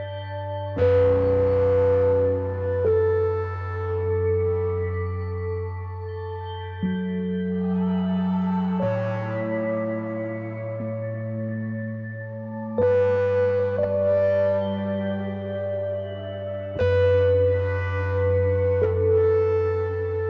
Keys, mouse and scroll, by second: 1.9-2.3 ctrl+scroll down 1, 2.3 click, 2.7 ctrl+scroll up 1, 3.3 ctrl+d, 3.6-7.2 drag, 7.3 click, 8.0 r, 8.5-10.1 drag, 12.5-15.8 shift+drag, 17.0 click.